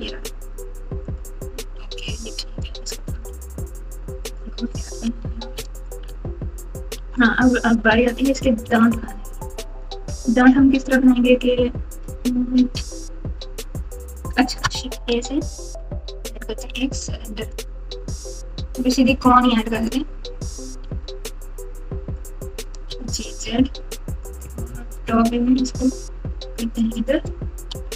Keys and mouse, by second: 2.2 click, 3.1 g, 4.8 click, 5.0 alt+z, 6.9 Tab, 7.6-8.6 typing, 14.9 shift+a, 20.8 s, 22.8 g, 24.8 KP_7, 25.7 g, 27.7 r.